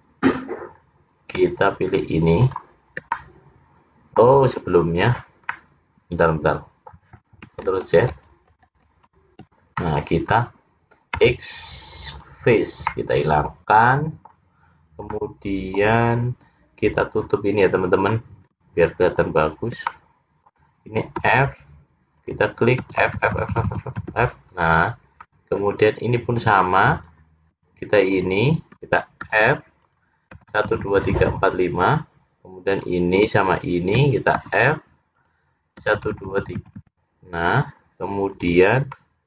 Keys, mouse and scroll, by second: 2.5 shift+click, 3.3 middle click, 5.7 middle click, 7.8 ctrl+z, 8.3 ctrl+z, 8.7 ctrl+z, 9.0 ctrl+z, 9.9 middle click, 11.3 x, 13.0 middle click, 15.2 middle click, 17.0 click, 18.0 click, 19.1 shift+click, 19.8 shift+click, 20.0 middle click, 21.3 f, 22.2 click, 22.9 f, 23.2 f, 23.8 f, 24.1 f, 25.3 middle click, 25.9-27.0 scroll up 1, 27.0 click, 27.0 scroll up 1, 28.2 shift+click, 29.3 f, 29.9 click, 30.5-31.3 f, 31.4 f, 32.8 click, 33.5 shift+click, 34.5 f, 35.2 click, 35.9-36.8 f, 37.0 f, 38.4 click, 39.0 middle click.